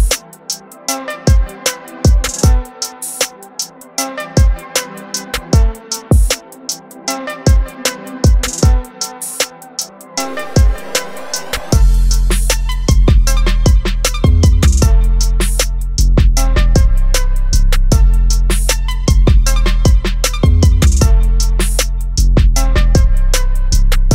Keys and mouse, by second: 0.1 click, 5.2 click, 8.9 click, 15.9 click, 18.3 click.